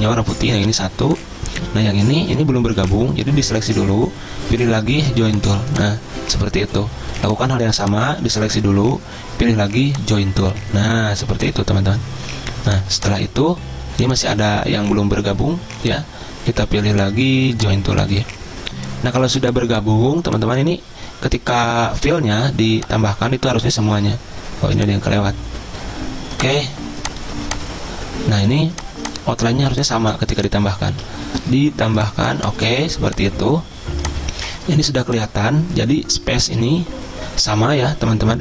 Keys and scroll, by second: 24.0 ctrl+z, 31.0 ctrl+z.